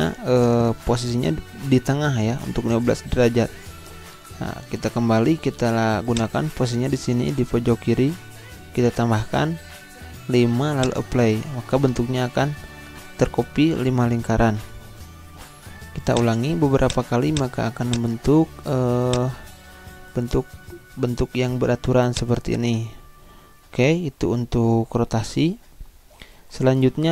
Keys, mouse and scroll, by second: 4.3 click, 4.4 ctrl+z, 6.1 click, 10.8 click, 16.1-25.0 drag, 25.7 Delete.